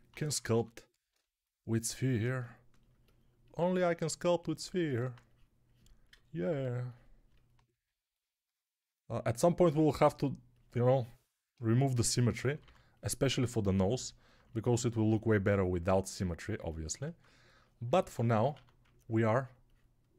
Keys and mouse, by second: 0.0-0.4 typing, 11.8 g, 12.2 ], 12.4 ], 12.5 ], 18.4 1.